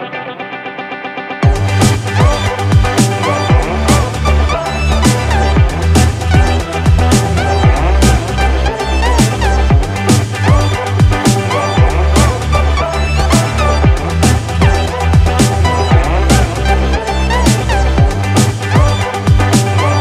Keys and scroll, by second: 0.8 ctrl+-, 1.0 ctrl+=, 2.8 ctrl+0, 4.0 ctrl+=, 5.5 ctrl+-.